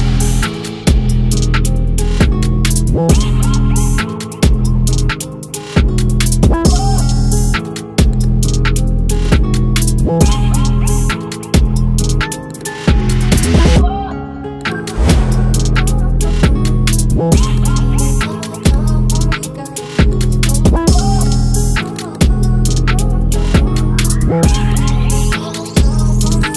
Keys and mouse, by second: 8.0 click.